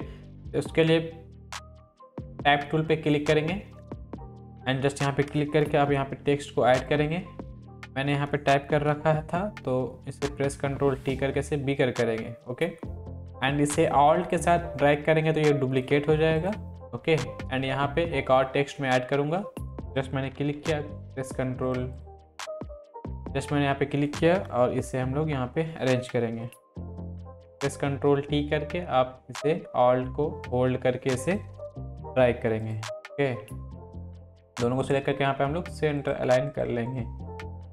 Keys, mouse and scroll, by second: 2.0-3.3 drag, 5.6 ctrl+v, 6.8 click, 8.0 shift+click, 8.7 ctrl+t, 10.0-13.2 alt+drag, 14.4-16.0 alt+drag, 19.7 click, 20.4 ctrl+v, 21.6-24.3 drag, 24.5 Up, 27.2 ctrl+t, 28.4-30.5 alt+drag, 32.0 Down, 32.6-34.1 drag.